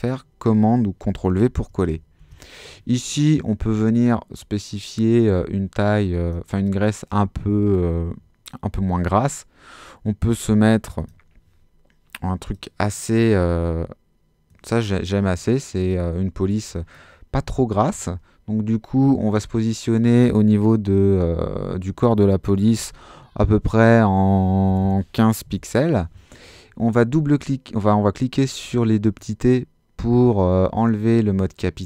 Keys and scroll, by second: 2.2 super+a, 22.4-23.4 typing, 24.7-25.9 typing.